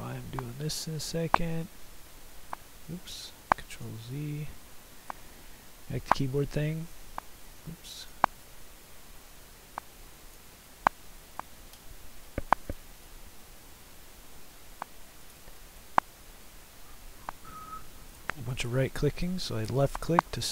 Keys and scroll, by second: 3.0 ctrl+z, 7.5 ctrl+z.